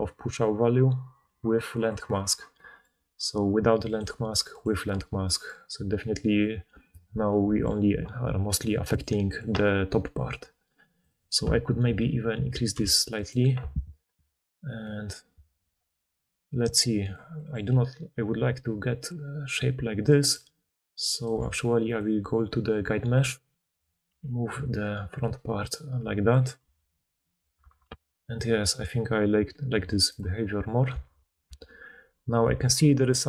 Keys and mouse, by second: 1.2 middle click, 1.2 right click, 4.5 click, 8.9-11.0 drag, 11.0-13.2 middle drag, 13.2-17.1 right drag, 17.0 click, 17.1-19.0 middle drag, 17.6-19.0 d, 19.0-23.1 drag, 20.3 d, 20.4 d, 20.5 d, 21.2 d, 23.1 Tab, 23.6 click, 24.0 g, 26.0 click, 26.5 middle click, 26.7 Tab, 27.6 alt+a, 30.1 click, 31.0 alt+q, 31.5 alt+q, 31.8-32.9 middle drag, 32.8-33.2 typing, 32.9-33.2 drag.